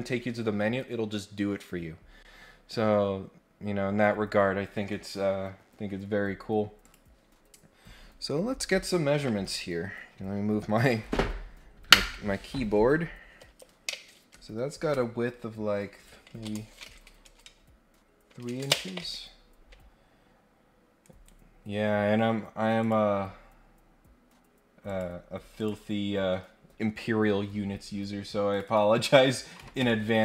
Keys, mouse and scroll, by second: 3.5-3.9 scroll down 4, 6.8 click, 19.7 scroll down 2, 20.0-20.6 scroll up 4, 21.0 right click, 22.8 click, 24.8 click, 25.5 click, 28.5 click, 28.6 click.